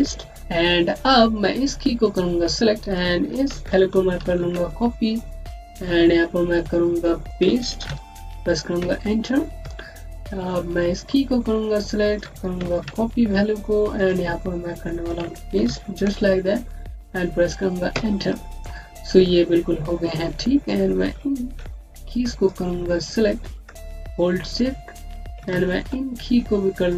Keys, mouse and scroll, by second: 0.4 click, 4.0 ctrl+c, 4.2 ctrl+c, 5.0 click, 7.7 v, 8.7 KP_Enter, 10.1 click, 12.7 ctrl+c, 13.5 click, 15.5 v, 17.8 KP_Enter, 19.2-19.8 scroll up 1, 19.8-20.5 scroll down 1, 20.5 click, 24.0 click, 24.2 Home.